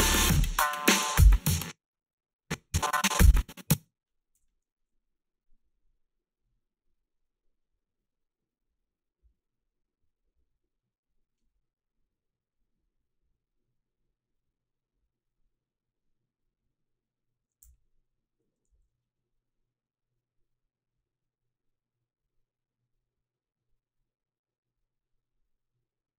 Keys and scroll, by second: 1.4 space, 4.4 g, 17.6 h.